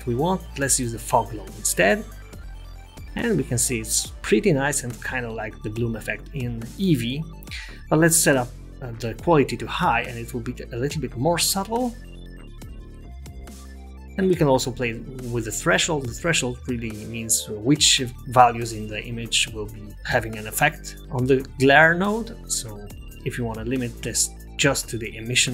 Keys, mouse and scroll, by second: 1.8 click, 5.4 middle click, 6.3 click, 8.0 click, 12.4 click, 22.1 click.